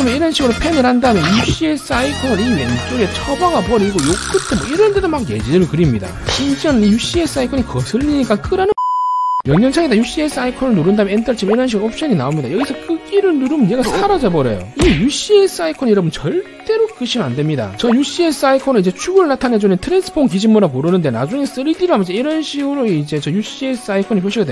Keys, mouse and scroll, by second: 0.3 scroll down 2, 0.6 scroll up 2, 1.2 middle click, 1.6 middle click, 2.5 middle click, 4.3 c, 4.6 right click, 5.1 click, 5.8 click, 13.7 click, 21.8-23.3 shift+middle drag, 23.7 scroll up 1.